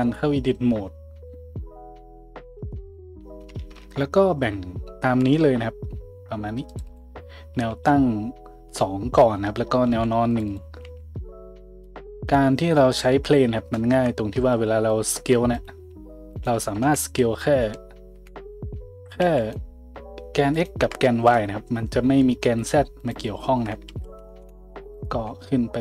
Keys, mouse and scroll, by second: 2.4-5.4 middle drag, 5.2 ctrl+r, 7.5 a, 9.9 ctrl+r, 10.8 a, 13.1 Tab, 13.9 KP_Decimal, 14.1-15.5 middle drag, 14.4 Tab, 15.5 click, 15.6 middle drag, 16.3 ctrl+click, 16.5-17.3 middle drag, 16.8 `, 18.1 `, 19.3 a, 19.4-20.6 drag, 20.6-23.0 shift+middle drag, 23.0-25.0 drag, 23.9 ctrl+z, 24.4 `, 25.0-25.8 middle drag, 25.2 `.